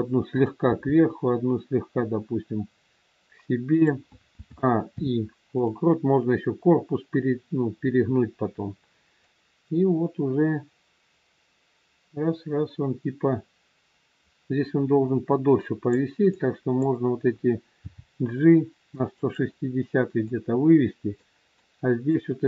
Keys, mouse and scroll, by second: 0.2 click, 1.1 g, 4.3 a, 4.8 i, 9.2 click, 16.2 click, 17.8 g, 20.2 click, 21.6 click.